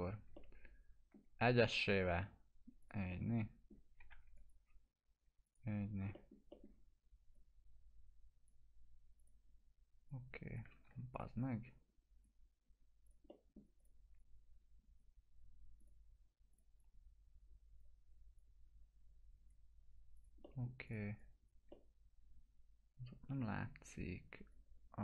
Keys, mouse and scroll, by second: 0.3-1.3 alt+middle click, 1.7 click, 3.1 middle click, 4.1 F3, 4.4 click, 5.8 scroll down 1, 6.1 middle click, 6.9 scroll up 1, 7.3-8.6 drag, 10.9 ctrl+z, 11.1-12.4 drag, 13.3 middle click, 13.8-15.1 drag, 20.4 middle click, 20.9 click, 21.7-23.6 middle drag, 23.9-24.8 drag.